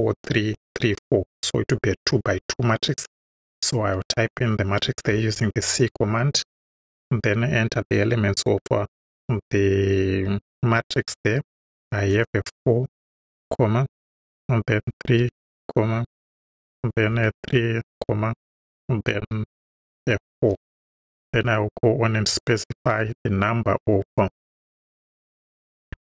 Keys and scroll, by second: 5.0 c, 5.9 shift+c, 6.8 shift+9, 12.1 4, 13.1 ,, 14.8 3, 15.2 ,, 17.1 3, 17.4 ,, 20.4 4, 21.3 Right, 23.0 ,, 24.6-26.0 typing.